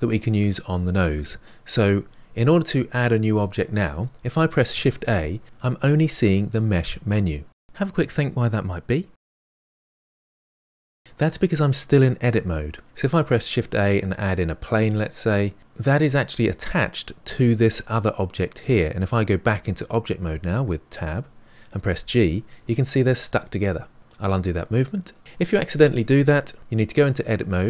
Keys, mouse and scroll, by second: 4.8 shift+a, 13.3 shift+a, 15.6 middle click, 20.9 Tab, 21.9 g, 24.8-26.6 middle drag, 26.7 Tab.